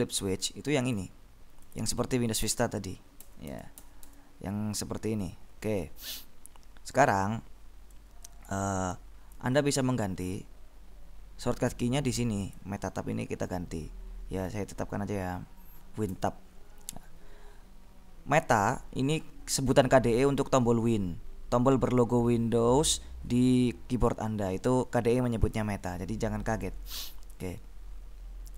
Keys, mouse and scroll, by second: 1.0 click, 1.7 click, 2.6 Tab, 3.3 Tab, 8.4 click, 12.6 click, 16.3 Tab, 26.7 click, 27.5 click.